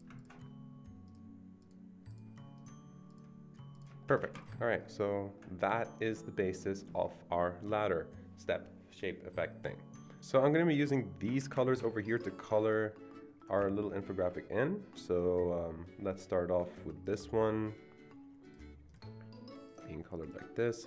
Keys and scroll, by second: 11.4 ctrl+v.